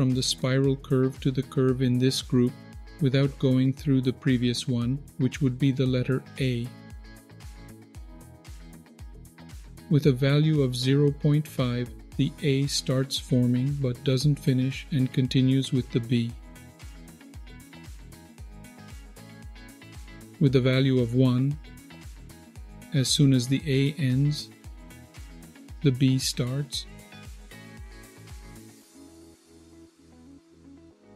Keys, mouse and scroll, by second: 7.0-9.1 shift+drag, 11.2 click, 13.7-19.5 shift+drag, 20.3 click, 22.4-29.7 shift+drag, 30.0 click, 30.6-31.1 shift+drag.